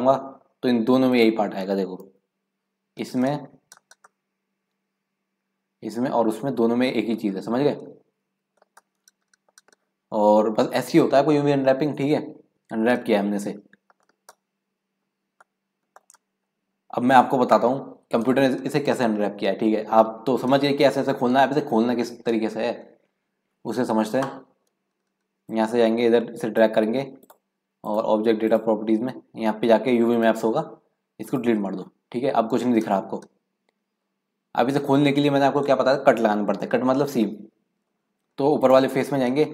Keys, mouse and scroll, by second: 2.1 KP_Decimal, 3.0 scroll down 1, 3.2 scroll up 1, 3.3 middle click, 3.9-4.3 scroll down 2, 4.3-8.3 middle drag, 8.3 KP_Decimal, 8.5-8.9 scroll down 1, 8.9 middle click, 9.6-10.7 scroll up 1, 12.0-12.8 scroll down 2, 12.8 scroll up 1, 13.1 middle click, 14.0-14.4 scroll down 2, 14.4 middle click, 15.1-15.6 scroll up 1, 15.6 middle click, 16.0 scroll down 2, 16.3 middle click, 16.9-17.3 scroll down 1, 17.3-18.3 scroll up 2, 18.3-19.0 scroll up 1, 19.0-20.4 scroll up 1, 25.5-27.3 drag, 27.8 click, 28.4 click, 30.2-32.0 drag, 32.0-32.4 scroll down 4, 33.9 scroll up 2, 34.1-37.5 middle drag, 37.5-38.0 scroll down 3, 38.0 middle click, 38.6 click.